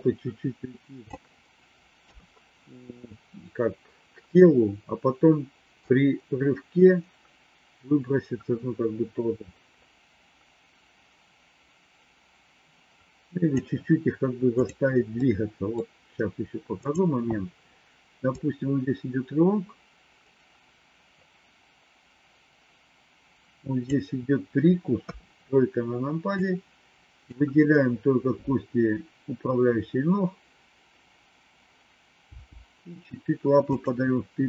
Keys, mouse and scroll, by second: 2.0 KP_3, 5.8-13.5 drag, 14.5 click, 15.1 middle click, 16.7 click, 18.3-24.0 drag, 24.9 KP_3, 26.5 click, 32.2 g.